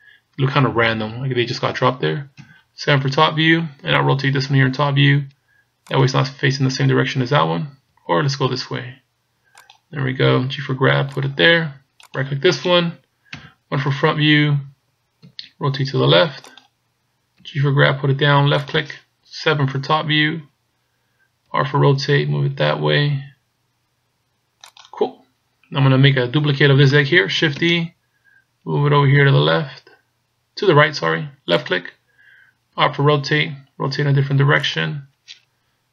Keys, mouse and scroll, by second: 2.4 KP_7, 4.1 r, 8.1 r, 10.5 g, 12.1 right click, 13.4 KP_1, 15.3 r, 17.5 g, 19.7 KP_7, 21.5 r, 27.8 shift+d, 32.9 r.